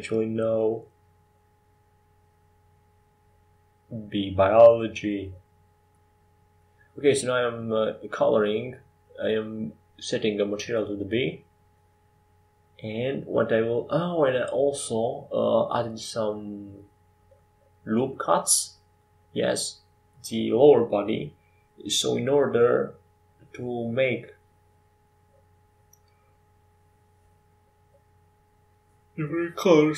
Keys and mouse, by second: 2.5-5.3 right drag, 5.7 ctrl+j, 6.7 middle click, 8.9-10.6 right drag, 9.5 ctrl+j, 11.5-13.6 drag, 13.6-24.2 right drag, 22.8 ctrl+j.